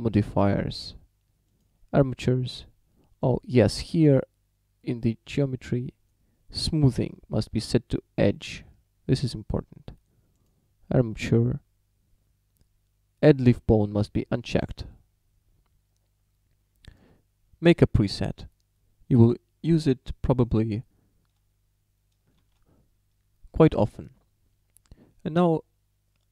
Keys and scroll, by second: 22.5 shift+d.